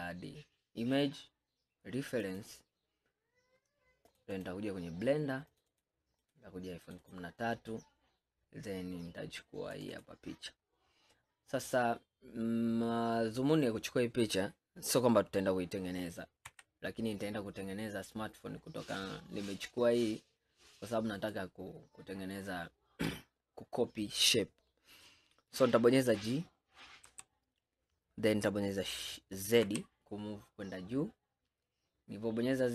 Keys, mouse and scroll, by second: 11.2-11.6 scroll down 4, 16.6 s, 21.8 scroll up 5, 22.6-23.0 scroll up 3, 23.5 scroll up 2, 27.1 g.